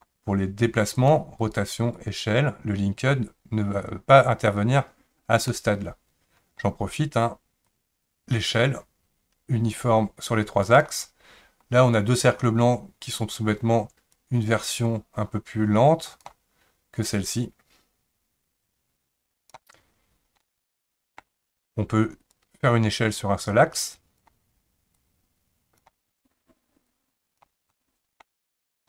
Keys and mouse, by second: 0.9 click, 1.4 click, 1.9 click, 5.5-6.6 middle drag, 7.6-10.6 drag, 14.1-16.2 drag, 17.1-19.5 drag, 20.4-21.2 middle drag, 22.4-24.2 drag, 24.9 click, 26.9 click, 27.7-28.2 middle drag.